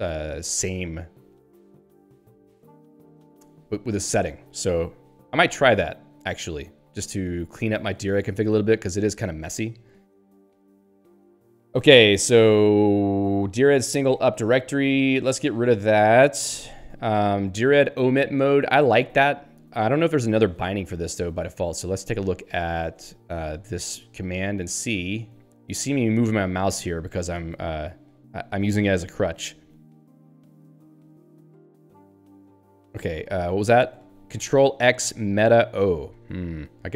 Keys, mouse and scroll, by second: 1.5 click, 2.5 click, 3.8 click, 5.1 Up, 7.6 Down, 9.1 click, 9.9 click, 12.0-12.3 scroll down 3, 13.4 click, 14.3 Left, 16.7 ;, 21.4 ctrl+f, 23.8 Return, 27.3 ctrl+n, 29.8 ctrl+p, 30.2 ctrl+n, 32.7 ctrl+p.